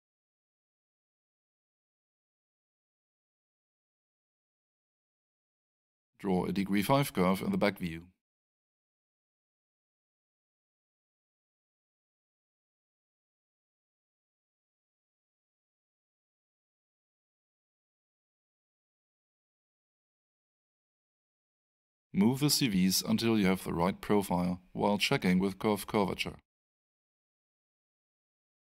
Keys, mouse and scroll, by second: 4.3 click, 5.5 double click, 10.0 ctrl+click, 13.7 click, 17.1 ctrl+click, 20.3 middle click, 23.0 click.